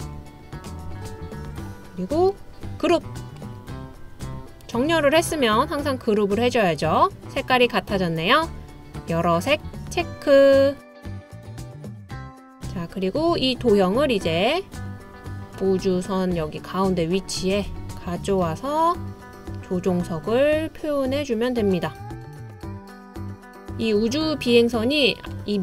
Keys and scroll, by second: 22.0 typing.